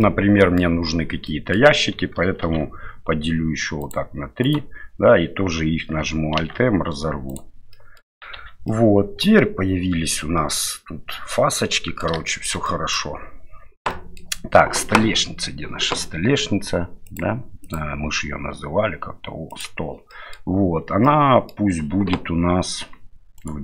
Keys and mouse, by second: 0.0 middle click, 1.2 middle click, 2.4 ctrl+r, 6.4 alt+m, 7.7 middle click, 8.3 Tab, 8.7 middle click, 10.7-12.0 middle drag, 12.2 shift+middle drag, 12.6-12.9 middle drag, 13.9 middle drag, 17.0 click, 17.6 click, 19.5 click, 20.1 middle drag, 21.0-21.5 middle drag, 23.4 right click.